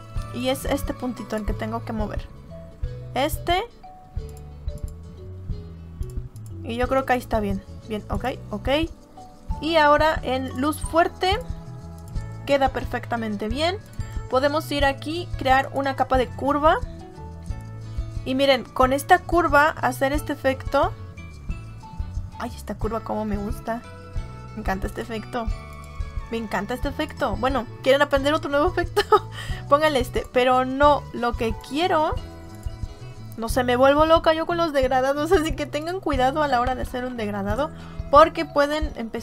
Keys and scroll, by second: 32.8 Delete, 37.1 ctrl+z, 38.5 Delete.